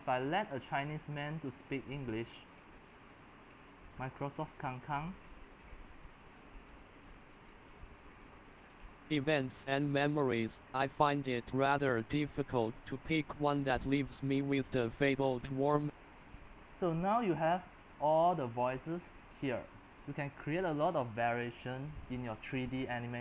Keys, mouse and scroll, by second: 2.5-6.5 middle drag, 6.5-13.9 drag, 15.9-23.2 drag.